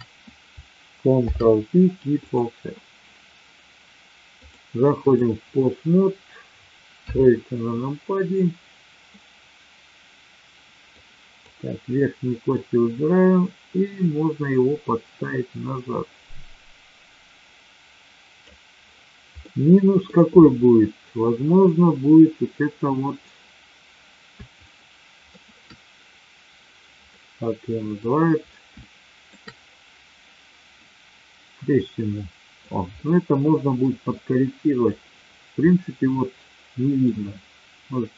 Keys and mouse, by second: 1.1 ctrl+p, 4.4-5.3 drag, 6.9 KP_3, 11.0-11.7 drag, 12.4-18.5 drag, 19.4-20.0 middle drag, 24.5-25.3 shift+middle drag, 27.0-27.9 middle drag, 28.8-29.3 shift+middle drag, 30.8-32.8 drag, 32.9-33.8 middle drag, 34.7 click, 35.5-36.9 middle drag.